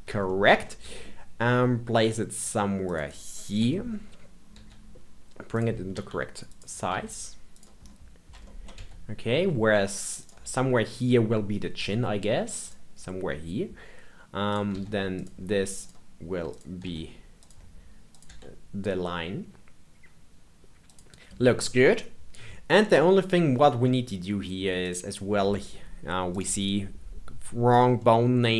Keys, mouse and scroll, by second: 0.2-0.8 shift+middle drag, 0.8 g, 3.5 KP_3, 4.5 g, 5.9 r, 6.8 s, 7.8-8.4 scroll up 5, 8.4 shift+middle click, 8.7 g, 11.7 g, 14.4 click, 14.7 g, 15.8 click, 16.4 click, 16.8 g, 18.0 click, 18.2 g, 22.8 middle click, 23.5 scroll down 2, 23.8 middle click, 24.7 click, 26.3 click, 27.9-28.5 middle drag.